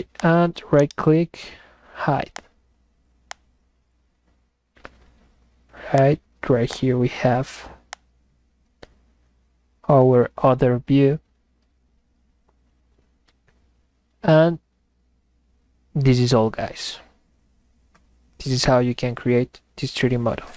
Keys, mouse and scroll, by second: 0.2 ctrl+click, 0.8 right click, 2.3 click, 3.3 click, 6.0 click, 6.7 click, 7.9 click.